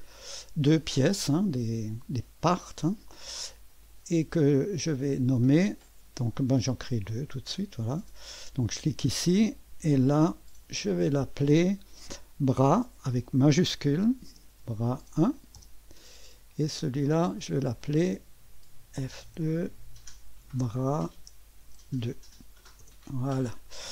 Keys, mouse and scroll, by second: 0.0 click, 3.8 click, 5.4 click, 7.0 click, 8.7 click, 9.2 click, 10.8 F2, 13.3-15.7 typing, 17.0-18.9 drag, 18.1-18.8 typing, 19.3 F2, 20.5-22.1 typing, 22.8 Return.